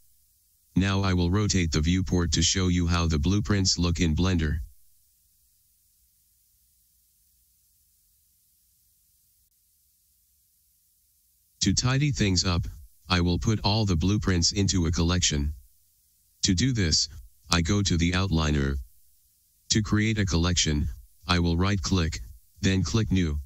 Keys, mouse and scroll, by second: 1.0 KP_1, 2.7-9.4 middle drag, 9.4-23.4 right drag.